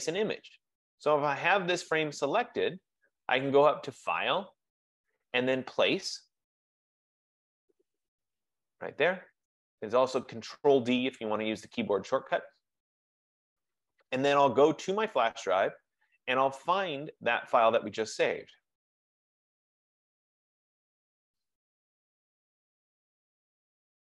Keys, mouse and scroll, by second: 4.3 click, 12.2 click, 15.4 click, 18.2 click, 18.3 click, 19.8 click, 20.1 click, 22.5 click, 22.7 click.